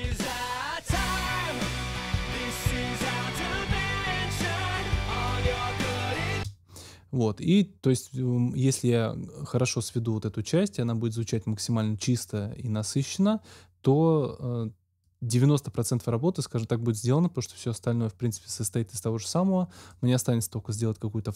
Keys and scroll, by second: 6.2 space.